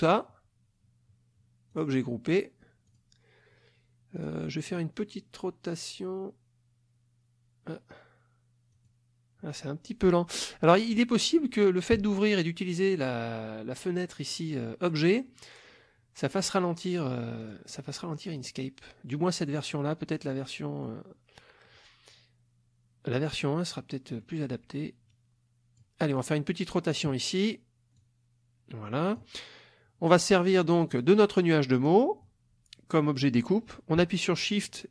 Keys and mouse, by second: 1.7 click, 2.9 click, 4.2 click, 4.7 click, 8.7 click, 17.4 click, 18.4 click, 20.2 middle click, 23.8-24.4 middle drag, 25.1 click, 26.2 click, 26.9 click, 27.9-29.4 drag, 30.9 click, 34.7 shift+click.